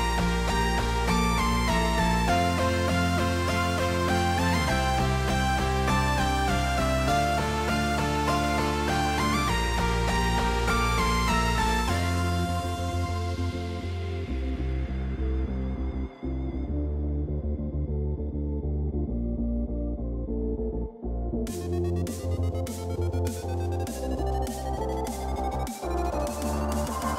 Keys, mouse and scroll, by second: 0.2 middle click, 0.9 middle click, 1.6 middle click, 1.8 middle click, 2.4 middle click, 2.7 middle click, 3.4-4.8 drag, 5.0-6.1 drag, 6.4 click, 7.9 middle click, 8.4 middle click, 8.8-9.4 middle drag, 9.5-10.0 drag, 10.6 middle click, 11.1 middle click, 11.7-12.1 middle drag, 12.6 middle click, 13.9-15.0 drag, 15.8 middle drag, 17.8 alt+h, 18.9 KP_0, 20.5 click, 21.4 middle click, 21.7 middle click, 22.4 middle click, 22.8 middle click, 23.2 middle click, 23.4 middle click, 24.5 middle click, 26.2 middle click, 26.8 middle click.